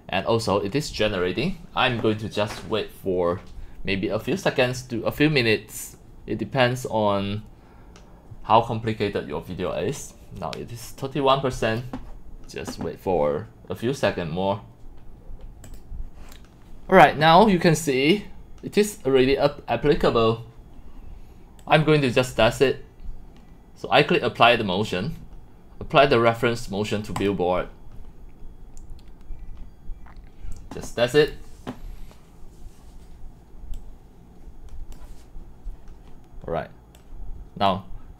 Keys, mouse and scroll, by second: 3.1 click, 15.7 click, 20.8 drag, 21.6 click, 22.3-23.2 drag, 30.4-32.3 drag, 33.7 click, 34.9 click, 35.4-36.7 drag, 37.2-37.8 drag.